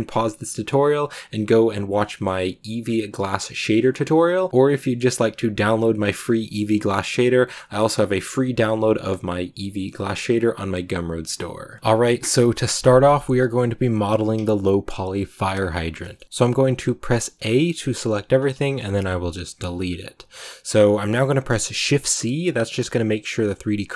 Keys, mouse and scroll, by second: 2.7-3.6 scroll down 1, 3.6 middle click, 4.3-11.7 middle drag, 11.7 click, 16.2 a, 18.5 shift+middle click, 18.8 x, 21.6 shift+c, 22.5-23.9 drag.